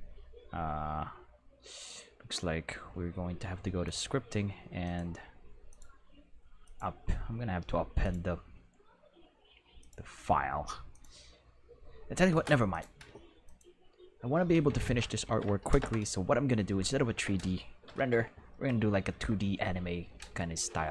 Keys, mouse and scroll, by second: 3.8 click, 4.8 click, 5.7 click, 6.6 click, 8.0 click, 9.8 click, 10.9 click, 12.7 click, 13.4 click, 13.8 right click, 14.8 ctrl+Tab, 15.2 ctrl+s, 15.8 Home, 17.8 n, 20.3 right click.